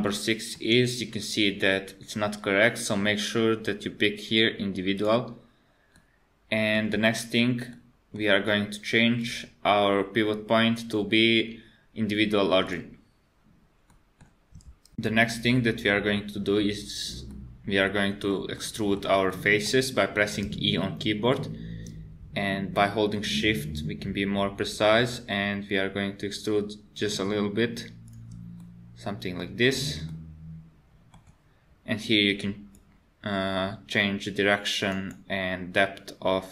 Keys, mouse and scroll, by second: 0.1 shift+middle click, 1.5-3.1 scroll up 4, 5.0 click, 6.0 middle click, 6.9-7.7 scroll down 4, 7.7 middle click, 9.2 click, 13.9 middle click, 17.3 middle click, 18.6 middle click, 19.3 middle click, 20.4 e, 28.6 middle click, 29.4-30.1 scroll up 4, 30.1 middle click, 32.8 click.